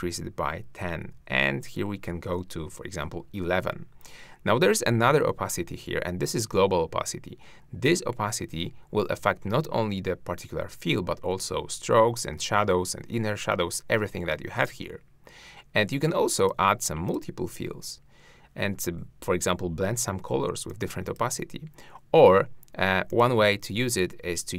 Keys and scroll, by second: 1.1 shift+Down.